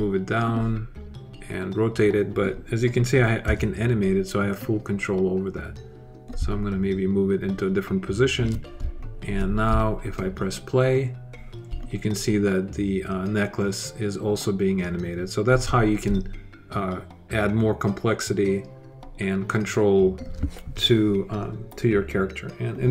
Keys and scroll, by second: 3.2 w.